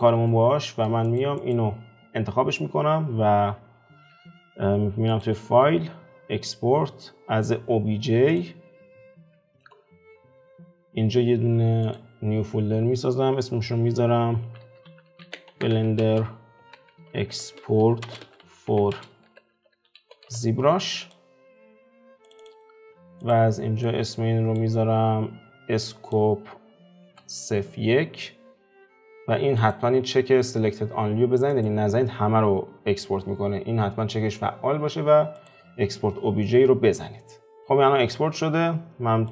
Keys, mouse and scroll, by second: 0.0 click, 0.3-1.1 middle drag, 1.1 click, 1.5 click, 37.6-39.3 middle drag.